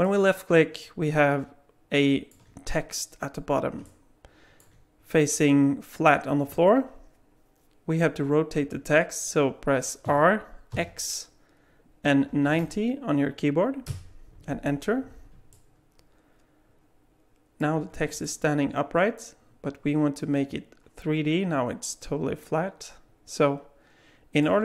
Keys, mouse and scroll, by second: 0.0 middle click, 3.8 middle click, 10.0 r, 15.5 middle click, 17.8 scroll up 3, 18.2 alt+middle click.